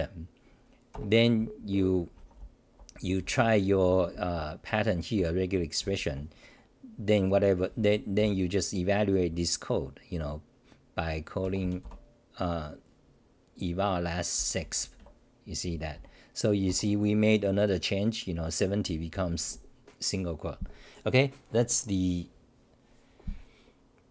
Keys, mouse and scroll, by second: 0.9 ctrl+g, 1.4-6.3 typing, 8.2 t, 11.8 Delete, 16.6 g, 19.1 n.